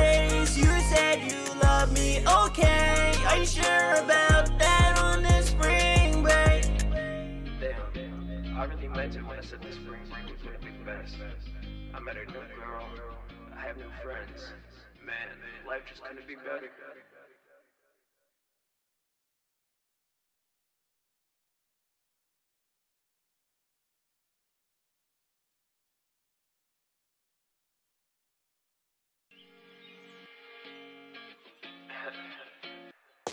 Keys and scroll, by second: 0.7 ctrl+End, 1.1 typing, 2.4 typing, 4.7-5.1 typing, 6.2 ctrl+Down, 6.3 ctrl+Down, 26.9 Return, 27.3 super+s, 32.0-32.7 typing.